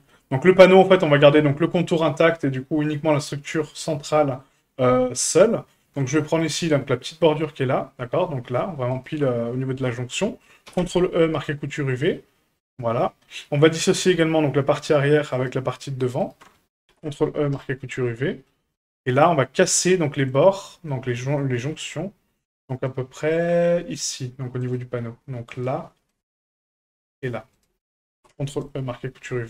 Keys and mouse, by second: 3.1 click, 4.1 shift+middle click, 6.2 shift+middle click, 8.9 alt+shift+click, 9.9 shift+middle click, 10.7 ctrl+e, 12.2 middle click, 13.2 middle click, 15.3 right click, 16.0 alt+shift+right click, 16.2 alt+shift+right click, 16.9 ctrl+e, 18.0 middle click, 18.7 shift+middle click, 19.4 shift+middle click, 20.0 shift+middle click, 20.4 middle click, 20.9 middle click, 21.4 shift+middle click, 22.6 middle click, 23.1 shift+middle click, 24.6 right click, 25.5 right click, 26.1 middle click, 27.5 ctrl+click, 28.2 ctrl+e, 29.3 shift+middle click.